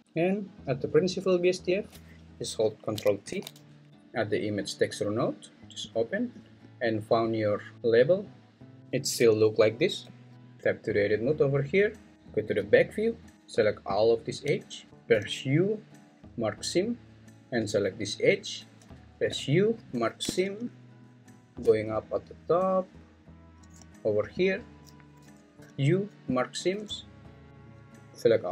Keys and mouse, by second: 0.8 click, 1.9 click, 5.9 click, 10.0 `, 10.4 Tab, 12.3 `, 13.9 alt+click, 15.1 u, 19.4 u, 25.6 u, 27.5-28.5 drag.